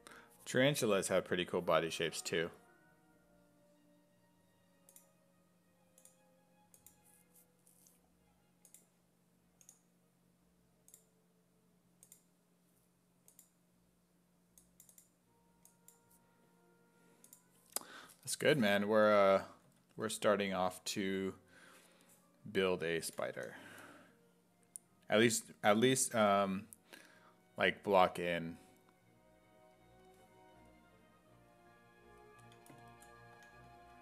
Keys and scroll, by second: 19.7 s, 23.1 b, 23.4 i, 33.1-34.0 typing.